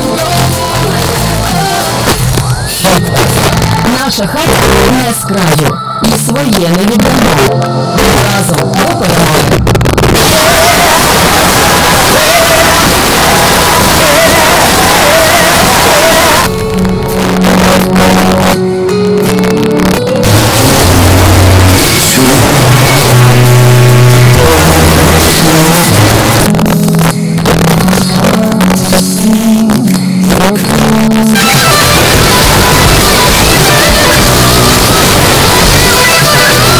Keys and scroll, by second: 16.4 Page_Down, 26.3 Page_Down.